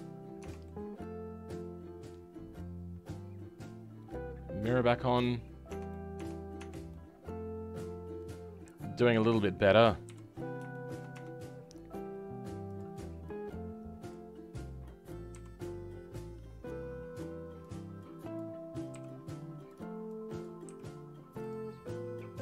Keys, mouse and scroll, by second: 0.4 Tab, 0.6-5.3 middle drag, 5.3-5.6 scroll down 3, 5.6 Tab, 5.9 middle click, 6.5 Tab, 6.9-10.0 middle drag, 10.0 KP_3, 10.3-10.7 scroll up 2, 10.7 shift+middle click, 11.1 Tab, 11.4 scroll up 2, 12.6-22.4 drag.